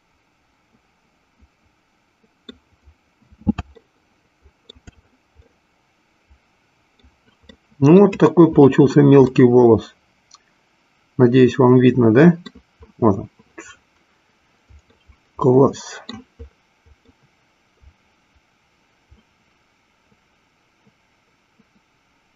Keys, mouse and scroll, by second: 3.7 shift+middle click, 5.3-7.1 middle drag, 7.6 middle click, 9.4-13.1 middle drag, 15.0-16.2 middle drag, 17.1-22.3 middle drag.